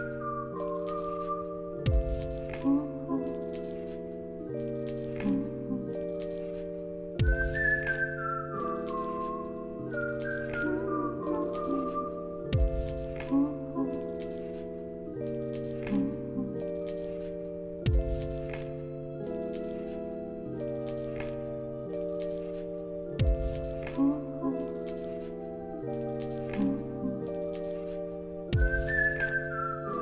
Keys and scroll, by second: 2.7-3.6 typing, 4.8 x, 8.2-9.1 typing, 10.3 x, 12.4 ctrl+c, 16.2 ctrl+c, 16.5 ctrl+v, 26.8 ctrl+c, 29.7 u.